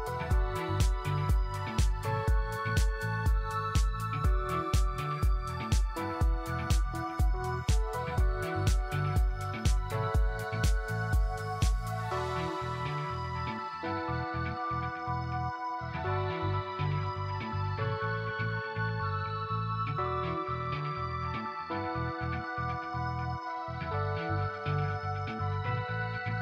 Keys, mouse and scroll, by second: 1.4 alt+middle click, 7.7 ctrl+middle click, 9.1 scroll up 1, 11.2 click, 16.4 right click, 17.7 q, 18.7 click, 21.3 click, 23.3 right click.